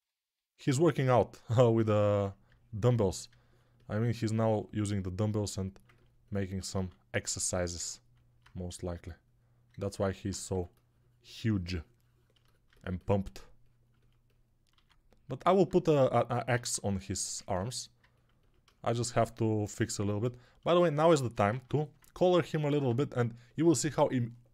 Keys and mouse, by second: 5.2 alt+q, 7.1 alt+q, 10.4 2, 14.6 alt+q, 16.6 alt+q, 17.4 alt+q, 20.2 alt+click, 20.2 alt+middle click, 20.2 alt+right click, 21.4 ctrl+Tab, 24.1 click, 24.4-24.5 right drag.